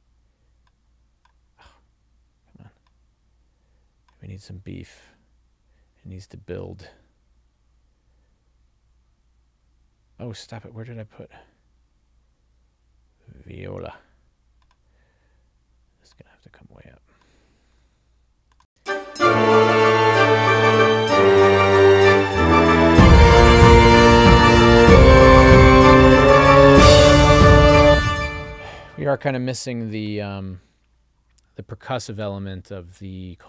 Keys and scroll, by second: 18.8 space, 27.9 space.